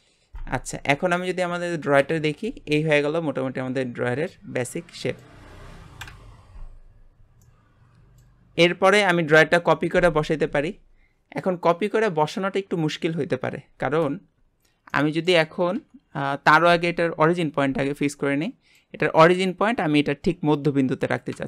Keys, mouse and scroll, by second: 0.6 scroll down 4, 0.9 middle click, 1.4 Tab, 2.0 KP_Divide, 2.9-6.0 middle drag, 6.0 KP_Divide, 6.8-7.2 scroll down 4, 7.4-8.4 middle drag, 8.4 scroll up 3, 14.2-14.5 scroll up 2, 14.9-15.7 middle drag, 15.7 KP_1, 18.1-18.4 scroll down 3, 18.4-18.9 middle drag, 18.9 scroll up 2.